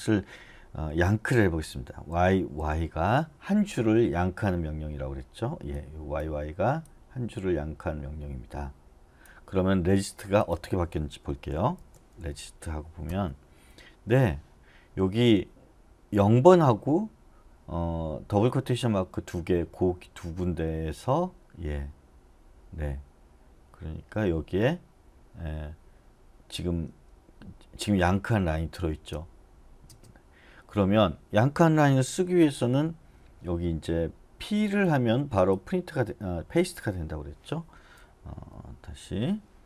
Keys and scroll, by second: 2.1 y, 2.6 y, 11.9-13.0 typing, 13.1 Return, 29.0 space, 29.9 space, 38.3 k.